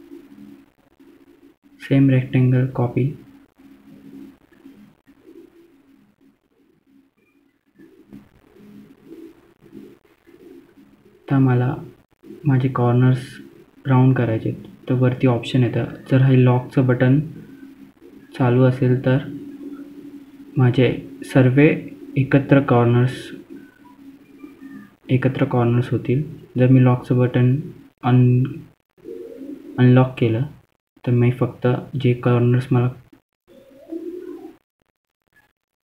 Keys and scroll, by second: 8.9 F3, 9.6 F2, 16.0 4, 16.8 BackSpace, 17.5 ., 18.6 1, 19.1 Return, 21.0 ctrl+z, 21.0-24.9 typing, 25.9-27.6 typing, 29.4-30.1 typing, 30.6 F3, 31.2 F2, 32.0-32.6 typing, 33.9 F3.